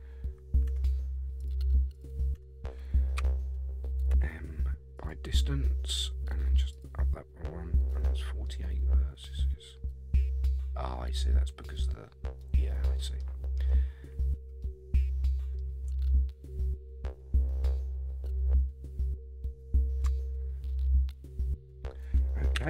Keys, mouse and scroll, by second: 0.7 Tab, 1.4 click, 1.9 click, 2.3 Tab, 3.2 a, 4.1 m, 6.7 click, 8.1-8.4 scroll down 3, 8.4-11.1 middle drag, 12.4 middle click, 12.4 scroll down 1, 13.2-13.7 scroll up 5, 13.9-14.6 scroll down 2, 14.6 middle click, 14.6 scroll down 1, 21.9-22.5 scroll down 2, 22.5 KP_1.